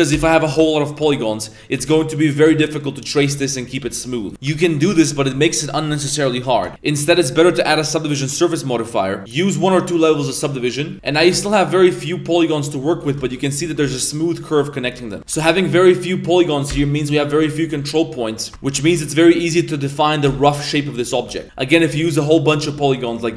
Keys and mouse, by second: 0.8 shift+middle drag, 1.4 right click, 1.7 g, 2.3 right click, 3.0 right click, 3.0 g, 3.6 right click, 3.6 g, 4.2 right click, 4.2 g, 4.3 a, 6.7 Tab, 7.0-8.1 drag, 9.6 click, 10.0 click, 10.9 Tab, 10.9 z, 10.9 g, 11.6 g, 13.0 z, 13.2 shift+middle drag, 13.6 Tab, 13.8 z, 14.8 Tab, 15.0 right click, 15.3 g, 16.3 right click, 17.4 right click, 18.5 z, 18.9 a, 19.1 right click, 19.3 g, 20.0 right click, 20.7 click, 21.4 ctrl+z, 21.7 g, 22.3 right click, 22.9 right click.